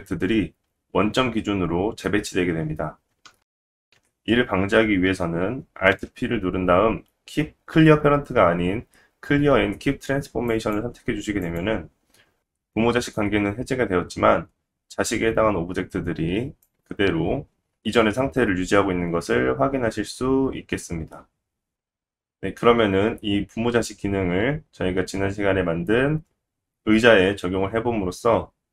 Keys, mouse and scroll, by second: 3.4 scroll down 1, 3.8 ctrl+z, 5.9 alt+p, 11.5-16.6 middle drag, 16.6-21.5 drag, 21.9-28.7 middle drag.